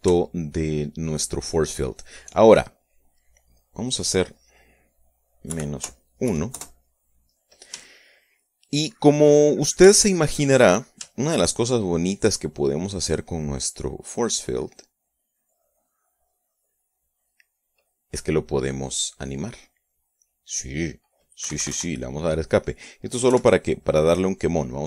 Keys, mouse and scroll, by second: 1.1-2.5 shift+drag, 4.7 click, 6.1 KP_Subtract, 6.9 KP_1, 7.1 KP_Enter, 8.6 shift+click, 9.5 shift+click, 10.6-12.2 shift+drag, 12.5 click, 12.7 middle click, 14.1 click, 15.8-18.3 drag, 22.1 Escape, 23.9 i.